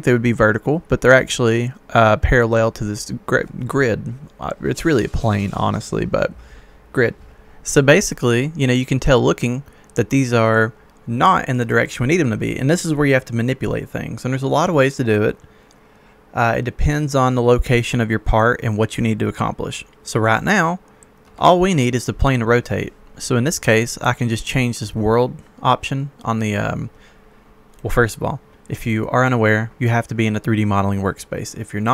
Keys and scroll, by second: 21.2 Escape.